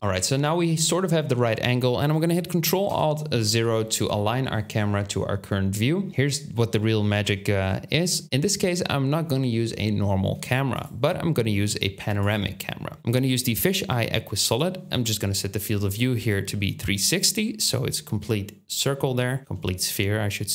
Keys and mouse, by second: 2.8 ctrl+alt+KP_0, 10.8-15.6 drag, 10.8-15.6 middle drag, 10.8-15.6 right drag.